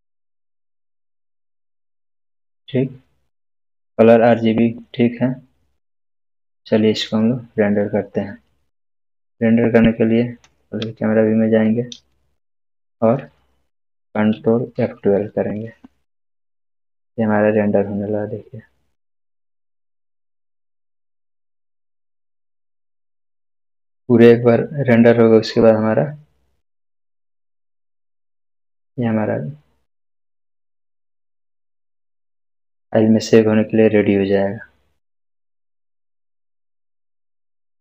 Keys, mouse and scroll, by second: 14.3 scroll down 1, 14.7 ctrl+F12.